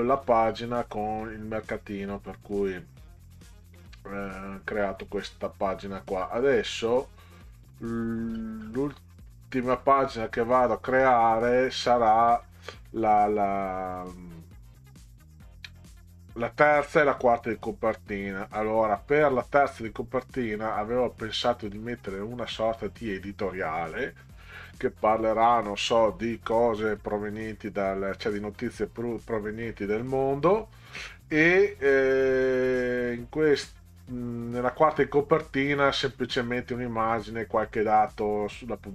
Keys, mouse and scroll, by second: 2.3 click, 3.3 click, 4.2-5.1 scroll down 6, 5.8-13.2 scroll down 44, 15.2-15.7 scroll down 4, 18.1-18.8 scroll up 4, 19.2 scroll up 2, 30.8-34.1 scroll up 16, 35.1-37.3 scroll up 10, 37.6-38.7 scroll up 6.